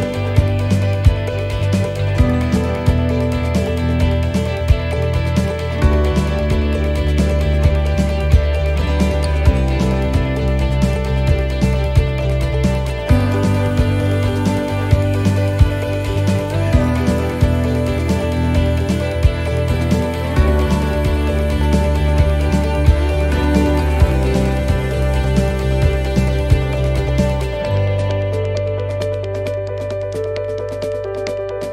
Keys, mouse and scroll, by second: 1.8 middle click, 1.8 s, 3.0 shift+middle click, 4.3 middle click, 6.0 s, 8.0 s, 11.3 middle click, 14.8 click, 16.4 middle click, 19.1 click, 23.3 shift+middle click, 23.8-24.2 scroll up 2, 24.2 middle click, 25.1 s, 27.8 click.